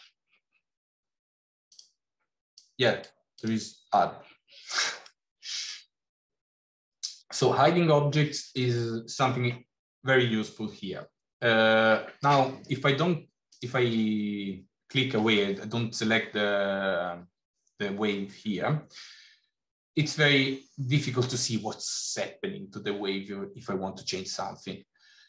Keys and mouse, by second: 5.0 middle click, 13.3 click, 20.4 middle click, 20.6 middle click.